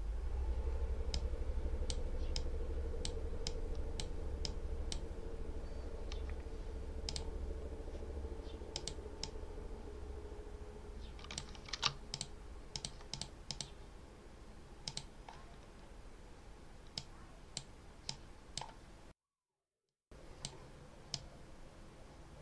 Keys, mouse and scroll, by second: 1.0 click, 2.2 click, 3.3 click, 4.3 click, 6.9 click, 8.6 click, 9.1 click, 11.6 ctrl+s, 12.0 ctrl+click, 12.6 click, 14.7 click, 16.8-17.6 drag, 17.9-18.6 drag, 19.7-20.5 drag, 21.0-22.4 drag.